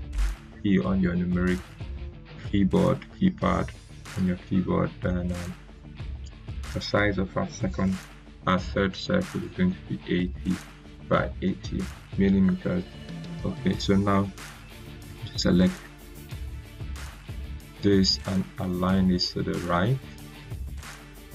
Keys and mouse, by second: 5.6 click, 9.2-9.6 typing, 10.7 Tab, 11.1 typing, 12.4 Return, 14.0-16.4 drag, 19.4 r.